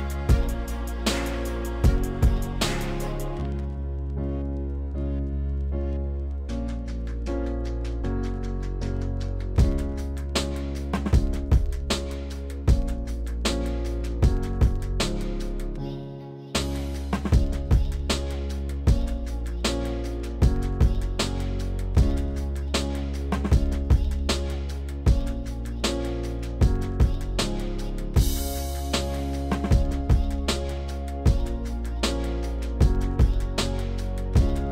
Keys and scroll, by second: 4.4 s, 8.5 ctrl+z, 10.5 s, 22.9 ctrl+z, 25.9 ctrl+z, 27.5 ctrl+z.